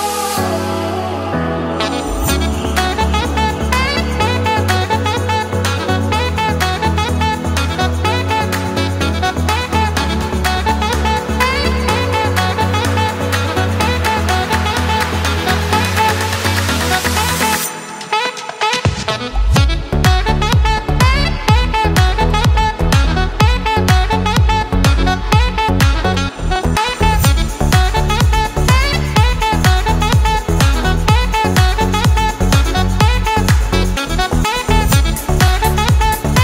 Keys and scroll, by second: 4.0 ctrl+z, 4.2 Up, 4.3 Down, 4.4 Up, 4.5 Down, 4.5 Left, 4.6 Up, 5.3 ctrl+c, 5.4 ctrl+shift+v, 7.4 Right, 7.6 Down, 7.8 Up, 8.0 Down, 8.1 Up, 8.2 Left, 8.2 Down, 8.4 Up, 8.6 Down, 13.8 Down, 15.2 Up, 15.3 Left, 16.3 ctrl+c, 17.9 Right, 19.6 Down, 26.6 ctrl+c, 26.8 ctrl+shift+v, 28.7 Right, 28.8 Up, 29.3 Left.